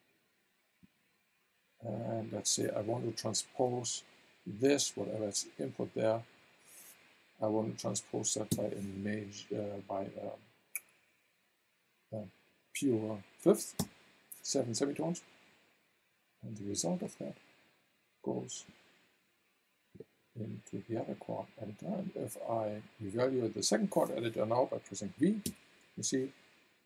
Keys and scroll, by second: 8.5 KP_7, 13.8 Return, 25.4 v.